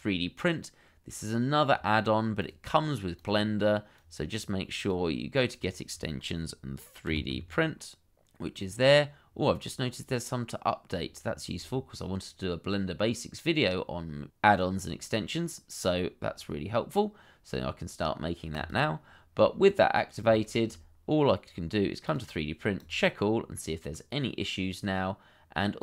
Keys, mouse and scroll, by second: 7.1 3, 7.3 d, 20.4 shift+middle click.